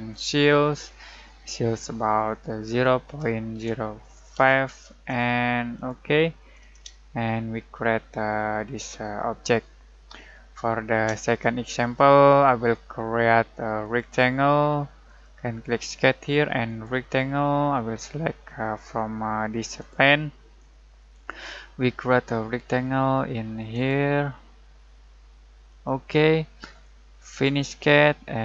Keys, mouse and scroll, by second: 2.6 alt+0, 3.0 alt+., 3.5 alt+0, 4.3 alt+5, 5.7 alt+click, 6.9-13.8 alt+shift+middle drag, 13.8 alt+right click, 15.0 alt+click, 21.0-23.7 alt+middle drag, 23.7 alt+click.